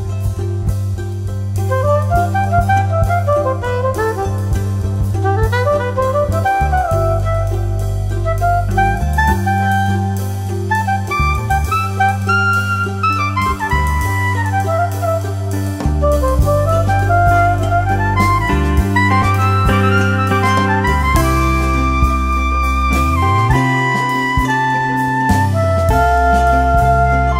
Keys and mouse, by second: 0.0-1.8 typing, 0.2 click, 1.3 click, 2.0 click, 3.2 space, 3.3 click, 3.7 space, 3.9 click, 4.1 space, 4.2 click, 8.6 click, 11.9 click, 11.9 click, 15.0 click, 19.6 click, 20.5 b, 21.1 click, 22.4 ctrl+z, 23.8-25.3 typing, 24.1 click, 26.4 0.